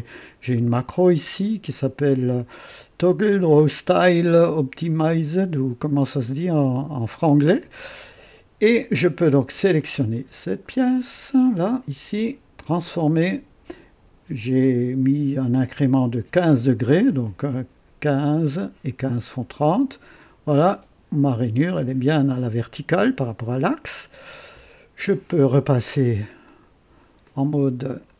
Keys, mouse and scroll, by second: 0.1-0.7 right drag, 9.7 click, 11.5 right click, 12.7 click, 17.4-19.4 drag, 20.1 click, 26.4 click, 27.2 click, 27.9 click.